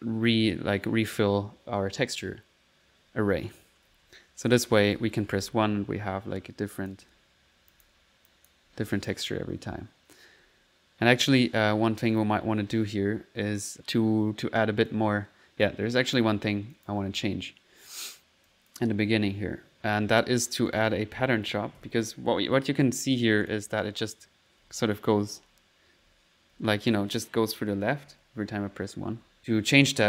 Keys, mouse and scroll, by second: 2.1 middle click, 3.3-6.8 typing, 6.8 click, 7.5 middle click, 7.8 click, 8.3 click, 8.7-9.5 typing, 9.1 click, 10.0 middle click, 10.6 typing, 12.7 1, 13.4 middle click, 13.6 1, 13.8 click, 14.6 click, 15.7 click, 16.8 click, 17.0 1, 20.7 click, 20.9-22.3 typing, 22.9 click, 23.2 click, 24.0-26.5 typing, 27.7-29.4 typing, 29.4-30.0 drag.